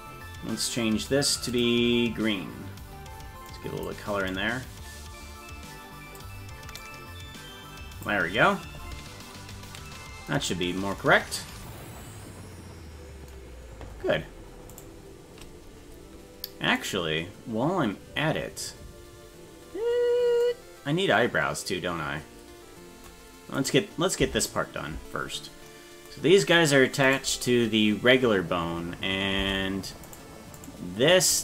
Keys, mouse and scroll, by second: 1.5 click, 10.5-10.9 scroll down 3, 14.8 right click, 17.0 right click, 23.6 right click, 24.2 Tab, 26.4-26.8 scroll up 3, 27.1 right click, 29.4 Tab, 30.1 right click, 30.6 right click.